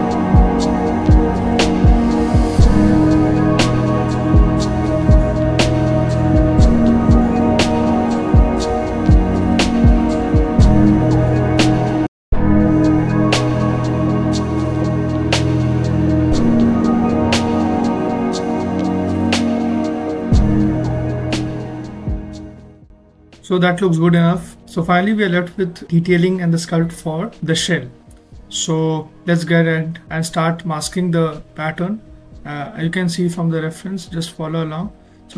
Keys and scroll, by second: 0.8 alt+z, 1.4 alt+z, 2.0 alt+z, 2.8 alt+z, 13.0 w, 23.1 ctrl+q, 31.1 z, 31.9 alt+z, 35.0 ctrl+z.